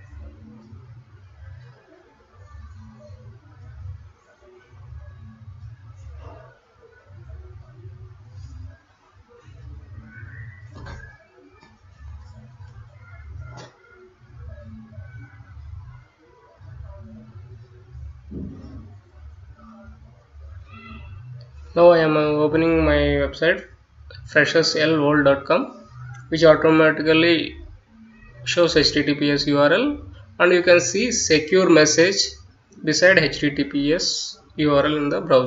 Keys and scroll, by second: 14.9-15.8 typing, 16.2 Return.